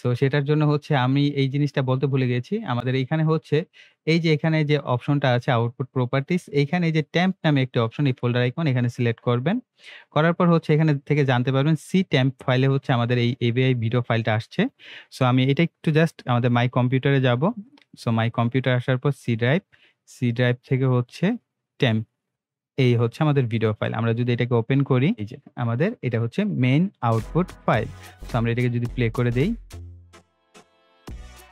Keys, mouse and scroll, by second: 0.8 click, 17.8 click, 21.9 click, 29.5 click.